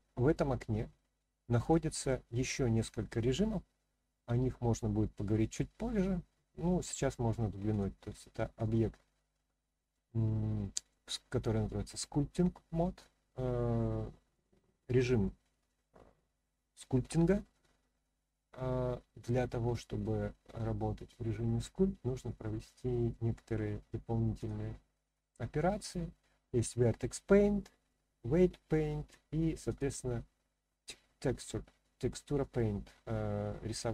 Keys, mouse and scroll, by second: 1.6-7.8 drag, 10.9-20.0 middle drag, 20.5-23.1 middle drag, 23.1-24.4 scroll up 1, 24.4 click, 29.8 click, 32.4-33.9 middle drag.